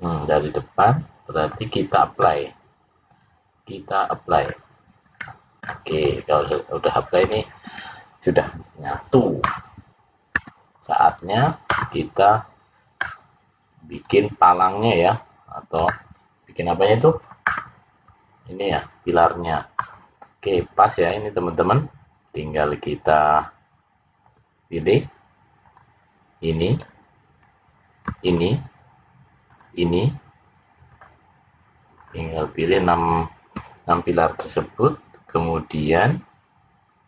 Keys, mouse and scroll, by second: 1.7 click, 3.0 click, 5.1 middle click, 5.8 click, 6.5 click, 13.8 click, 25.6 click, 26.6 click, 28.2 shift+click, 29.4 click, 30.8 shift+click, 31.8 shift+click, 32.9 shift+click.